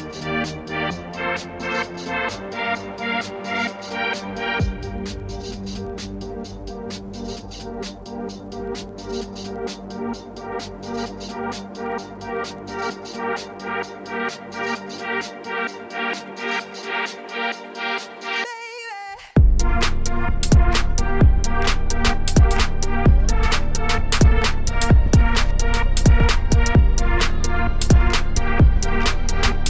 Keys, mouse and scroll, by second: 0.7 click, 0.9 r, 1.9 ctrl+1, 2.3 Tab, 2.5 ctrl+1, 3.0 Tab, 3.5 click, 3.6-4.0 scroll up 2, 4.0 Tab, 4.2 ctrl+2, 4.5 Tab, 4.9 s, 5.6 click, 5.7 s, 7.6 click, 8.0 r, 9.2 ctrl+r, 10.5 ctrl+r, 11.9 click, 12.1 g, 14.7 click, 14.9 g, 15.8 click, 15.9 g, 19.0 click, 19.3 shift+s, 19.7 Tab, 22.4 Tab, 22.6 s, 23.3 s, 24.2 Left, 24.6 g, 26.6 ctrl+r, 27.6 Left, 27.8 e.